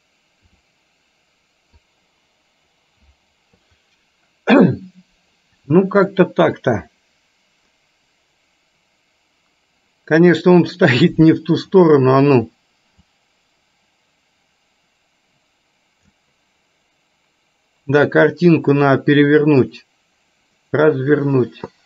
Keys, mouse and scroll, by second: 0.6 r, 13.3-16.4 drag.